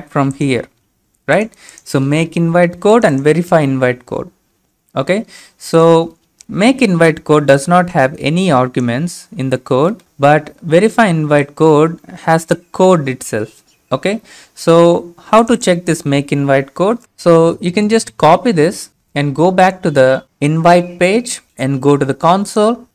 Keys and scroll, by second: 16.8 ctrl+c, 18.7 ctrl+c.